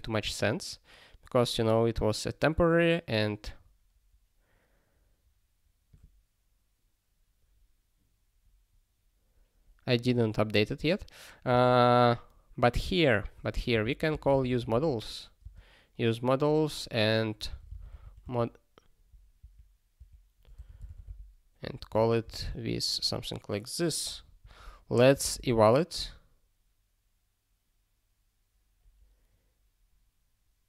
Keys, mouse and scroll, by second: 0.2 scroll up 1, 2.4 scroll up 1, 3.4 scroll down 1, 5.9 click, 8.4 scroll up 1, 9.9 click, 11.5 Return, 13.2 (, 13.5 u, 14.6 l, 15.4 space, 17.2-18.4 typing, 19.5 ctrl+BackSpace, 20.5 m, 20.9 l, 21.9 ctrl+g, 22.4 ctrl+s.